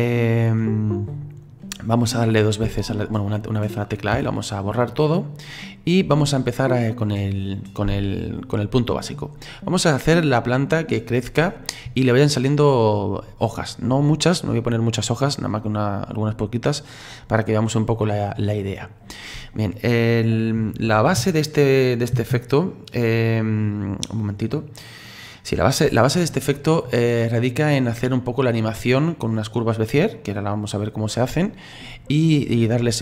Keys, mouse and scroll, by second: 2.6 a, 4.1 Delete.